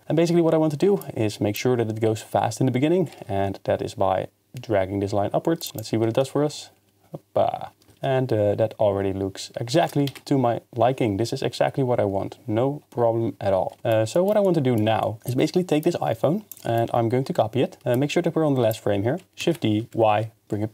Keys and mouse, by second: 1.0 click, 3.3 g, 5.6 click, 6.1 shift+space, 10.1 ctrl+s, 15.9 drag, 17.9 click, 20.4 y.